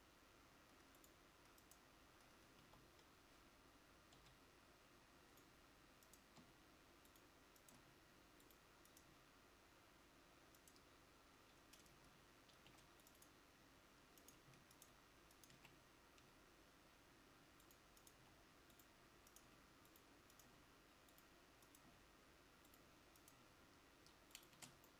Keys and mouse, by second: 12.6 ctrl+r, 16.1-18.3 right drag, 18.3-24.7 g, 24.7 Tab.